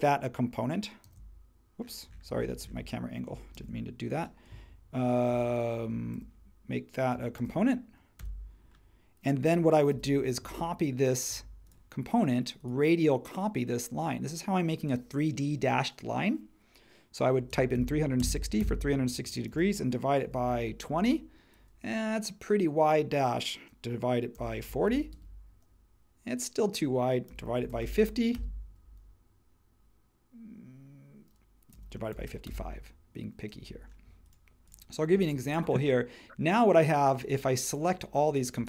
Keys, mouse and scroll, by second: 1.0 shift+c, 3.5 shift+c, 6.1 super+g, 7.4 shift+g, 8.2 Return, 9.9 q, 17.2-20.9 typing, 24.1-25.3 typing, 27.3-28.3 typing, 31.4-33.5 typing, 35.3 super+e.